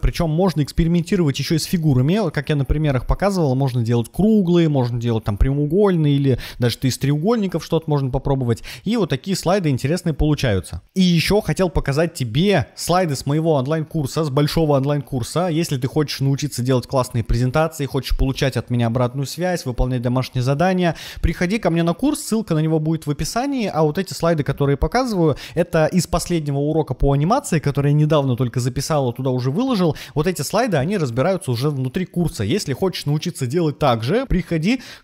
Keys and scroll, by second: 2.1 Left, 2.7 Right, 6.7 Left, 9.1 Right, 13.1 Right, 15.2 Right, 16.6 Right, 19.9 Right, 22.8 Right, 24.2 Right, 27.8 Right, 30.2 Right, 32.3 Right.